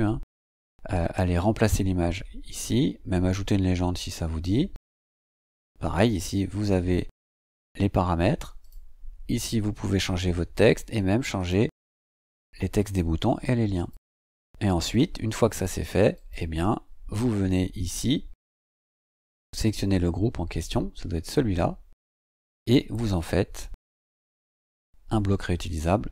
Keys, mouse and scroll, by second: 4.2-4.9 scroll down 2, 4.9 scroll up 2, 5.1-5.5 scroll down 2, 8.6 click, 11.4 click, 12.3 click, 13.7 click, 15.2-15.5 scroll up 2, 16.1 click, 19.6 click, 23.1 click.